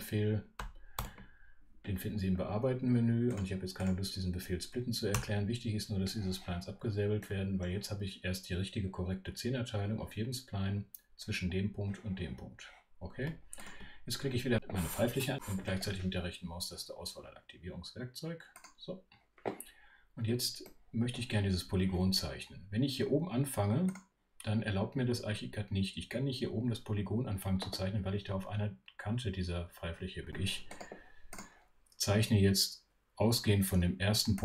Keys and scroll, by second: 0.9 shift+super+ö, 5.1 BackSpace.